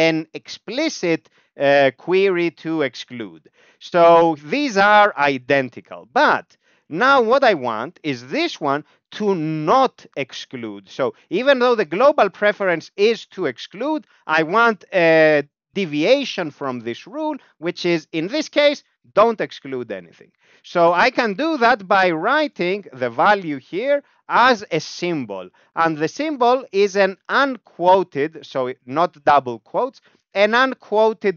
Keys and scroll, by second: 3.3 ctrl+g, 3.9 Down, 4.1-5.0 Down, 6.9 Right, 7.4 Left, 7.6 Left, 7.8 Left, 7.9 Left, 8.2 Right, 8.3 Right, 8.9 Right, 21.4 ctrl+alt+space.